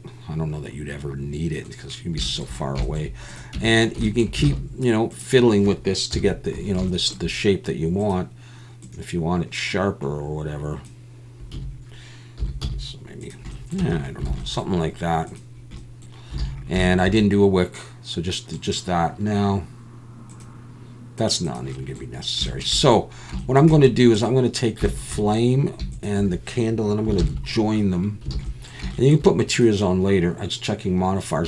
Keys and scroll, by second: 3.5 Tab, 4.5 alt+a, 6.1 KP_1, 11.5 a, 12.4 s, 12.6 z, 13.8 Tab, 14.3 alt+a, 16.4 alt+a, 27.2 ctrl+j, 28.3 alt+a.